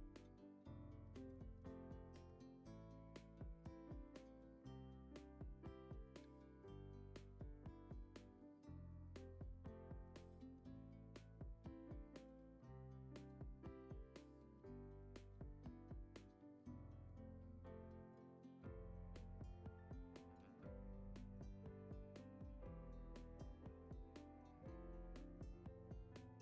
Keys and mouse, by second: 0.3 middle click, 0.6 drag, 1.1 shift+drag, 1.5 shift+click, 1.8 KP_0, 2.4 g, 2.9 s, 3.4 g, 4.9 drag, 5.3 shift+drag, 5.8 g, 6.3 s, 6.6 g, 7.6 click, 7.8-10.6 typing, 12.8 shift+d, 13.9 g, 14.5 g, 17.2-20.2 typing, 21.7 click, 22.0 shift+middle click, 22.6 shift+middle drag, 23.9 g, 24.5 g, 26.3 shift+middle click.